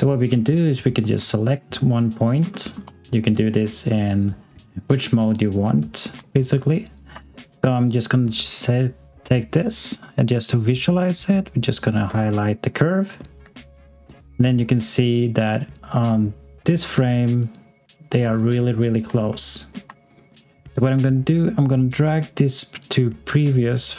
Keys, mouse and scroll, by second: 0.3 click, 1.3 alt+click, 2.5 alt+middle click, 6.3 alt+click, 12.3 alt+click, 15.7 click, 18.5 scroll up 1, 19.3 alt+middle click, 21.0 middle click.